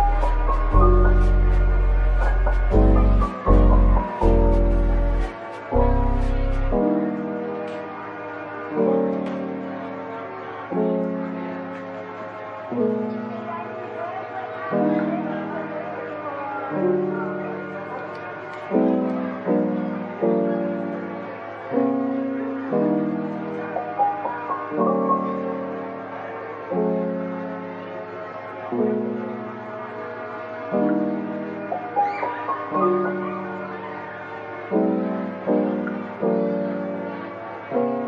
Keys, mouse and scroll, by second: 0.0-1.0 typing, 5.2-6.1 typing, 7.8 double click, 9.2 typing, 11.6-12.1 typing, 16.4 double click, 17.0 middle click, 21.3 typing, 21.5 Return, 23.1-24.0 typing, 25.6 typing, 25.8 Return, 27.3 double click, 28.3 middle click, 30.6 double click, 31.0-32.0 scroll down 1, 32.0 /, 32.8-34.2 scroll up 1, 35.6-37.1 scroll down 1, 37.4 scroll up 1.